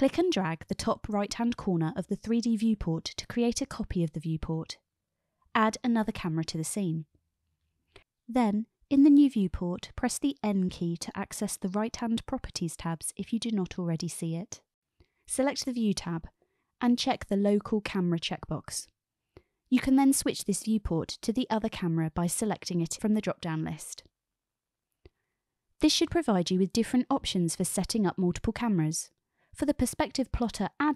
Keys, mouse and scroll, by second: 1.5-3.5 drag, 4.4 click, 6.5 shift+a, 11.6 n, 17.9 click, 20.3 click, 22.2-23.7 drag, 25.0 KP_0, 26.2 KP_0, 30.3 click.